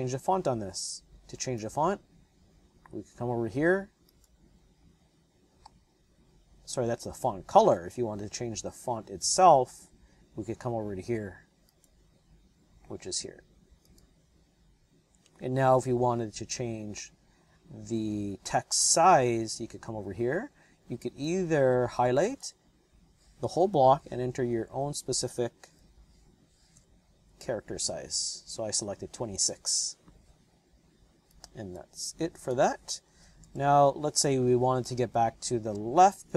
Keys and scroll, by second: 24.3 KP_2, 25.7 KP_6, 26.7 KP_Enter, 33.1 Return, 33.4 Return.